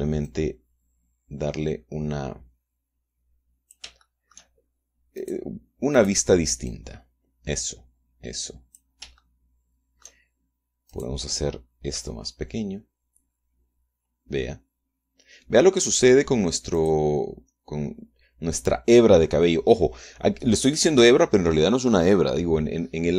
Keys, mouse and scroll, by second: 0.9-4.5 drag, 4.7 shift+middle click, 5.8 right click, 6.6 right click, 7.3-9.6 drag, 9.8-10.9 shift+middle drag, 11.2 middle click, 11.5 click, 12.6 s, 17.4 click.